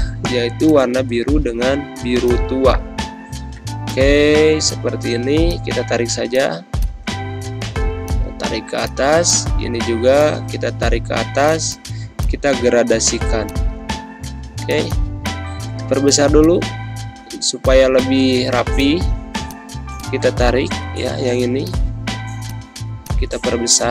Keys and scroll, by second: 1.8 g, 15.0 z, 15.8 space, 20.5 ctrl+g.